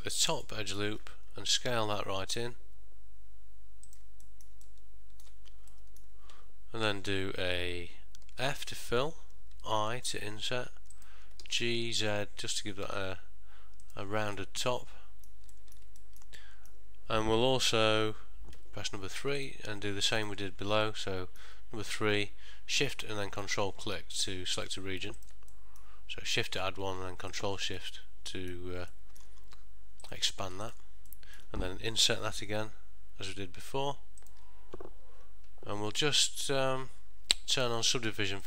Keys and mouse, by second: 0.0 alt+click, 0.5 middle click, 1.6 s, 4.3 middle click, 4.8 ctrl+middle click, 5.8 middle click, 8.6 f, 9.7 i, 14.5 middle click, 15.6 ctrl+middle click, 16.1 shift+middle click, 16.5 middle click, 18.8 3, 19.5 click, 20.3 ctrl+shift+click, 20.9 middle click, 23.5 middle click, 24.7 shift+click, 25.3 ctrl+shift+click, 25.7 middle click, 26.5 shift+click, 27.4 ctrl+shift+click, 27.9 middle click, 29.0 shift+middle click, 30.1 shift+click, 30.8 ctrl+shift+click, 31.2 middle click, 32.5 i.